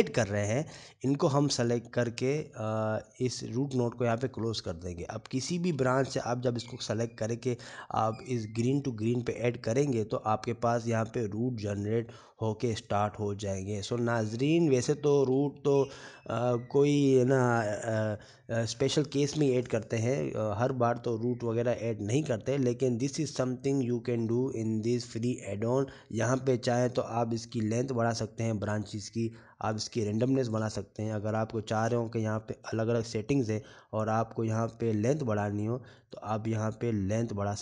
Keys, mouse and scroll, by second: 5.6-6.8 scroll up 10, 6.9 shift+middle click, 8.0 scroll up 3, 9.1 click, 12.8 scroll up 4, 13.0 shift+middle click, 14.2 scroll down 4, 14.9 middle click, 22.2 scroll up 2, 22.8-23.2 scroll up 1, 23.2 scroll down 3, 23.9 scroll down 3, 25.7 click, 31.3 click, 32.3 shift+middle click, 33.1-33.5 scroll up 4, 33.7 shift+middle click, 34.7 click, 37.2 click.